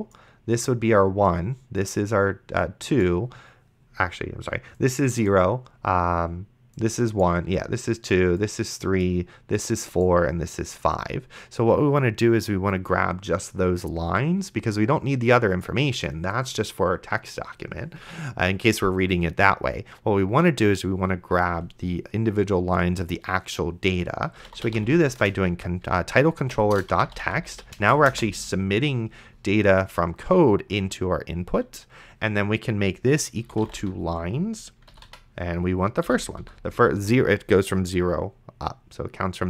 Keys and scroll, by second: 24.2-25.3 typing, 26.4-28.4 typing, 33.5-36.4 typing, 36.1 End.